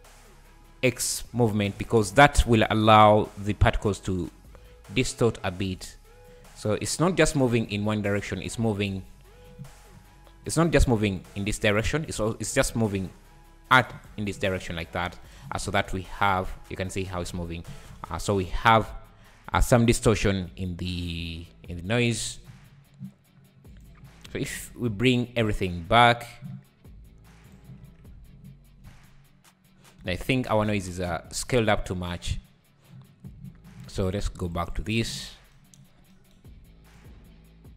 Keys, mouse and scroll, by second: 1.6 `, 2.2 scroll up 2, 2.9 scroll up 2, 3.8 click, 6.5 `, 6.9-7.5 scroll down 7, 8.2-9.9 drag, 9.9 KP_7, 10.7-15.3 drag, 15.3 shift+right click, 15.7 space, 17.9 `, 18.6 scroll up 3, 18.8 `, 19.3-19.7 scroll up 3, 21.2 space, 21.9-24.1 drag, 24.1-24.6 scroll down 3, 24.6 alt+h, 25.4 /, 26.3 scroll up 2, 27.5 click, 28.1 scroll up 2, 28.8 space, 30.0 space, 30.1-30.6 scroll down 7, 30.7 `, 31.2-31.9 scroll down 1, 31.9-34.6 drag, 34.7 click, 36.9 click.